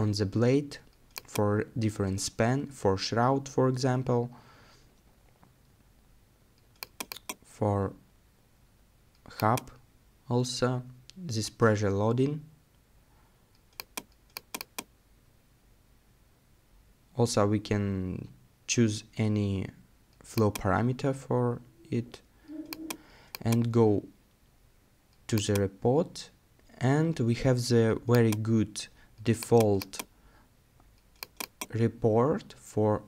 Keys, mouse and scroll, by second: 15.0 scroll down 1, 15.3-15.8 scroll up 1, 15.8 scroll down 1, 16.0 scroll up 1, 16.1-16.7 scroll down 1, 17.5-19.0 scroll up 1.